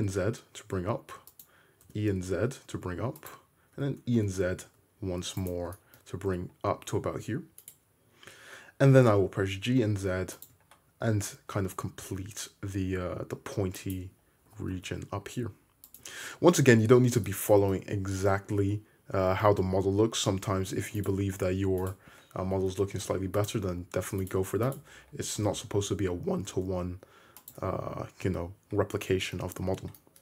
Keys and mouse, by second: 1.9 e, 3.8 e, 6.8 1, 8.8 g, 10.0 shift+middle click, 10.7-13.8 middle drag, 13.8 click, 13.9-21.0 middle drag, 14.5 g, 21.1 middle click, 21.8 shift+click, 21.9-23.5 middle drag, 22.5 g, 24.3 click, 24.7 shift+click, 25.4 g, 27.5-30.2 drag, 29.1 2.